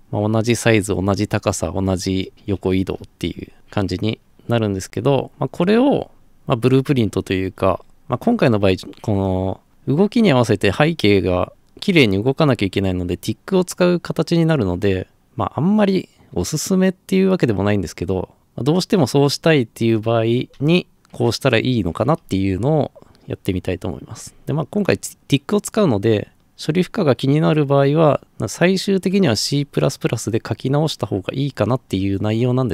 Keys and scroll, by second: 0.0-3.2 typing, 3.2 Escape.